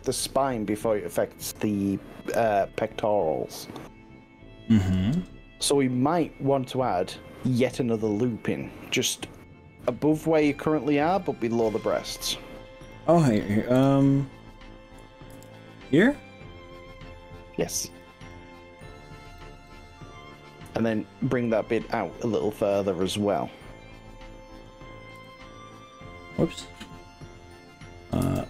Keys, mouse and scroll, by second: 2.9 click, 3.1-6.9 middle drag, 7.5 scroll down 2, 8.0-10.1 middle drag, 10.8-11.5 middle drag, 11.9 click, 12.9 click, 13.8 click, 14.1-14.5 scroll up 4, 15.3 ctrl+r, 18.3 middle click, 19.3 right click, 19.7-22.9 middle drag, 23.4-24.7 middle drag, 25.1 g, 26.1 middle click, 26.8-27.6 scroll up 4, 28.3 s.